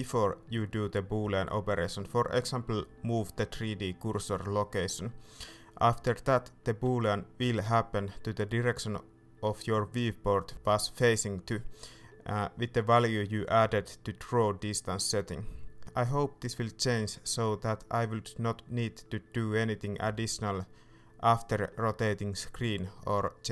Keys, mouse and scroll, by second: 1.1-4.2 middle drag, 1.1 KP_7, 4.2-6.6 ctrl+drag, 6.6-7.7 right drag, 7.7-8.8 drag, 8.8 Escape, 14.7 p, 15.8 p, 17.9-21.6 shift+middle drag, 21.6-23.5 ctrl+drag.